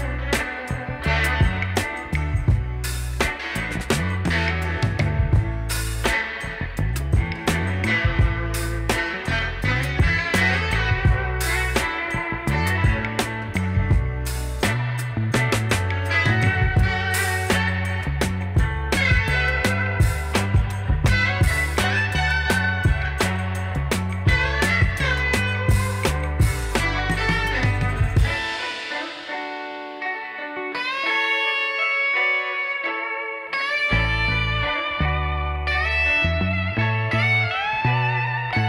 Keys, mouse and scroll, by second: 17.8 alt+click, 19.9 alt+click, 22.2 alt+scroll up 1, 23.4 alt+click, 24.0 alt+click, 25.0 alt+click, 25.7 alt+click, 26.7 alt+click, 27.9 alt+click, 28.4 alt+click, 29.0 alt+click, 33.2 alt+click, 33.6 middle click, 34.2 alt+click, 35.7 alt+click, 38.0 middle click, 38.5 alt+click.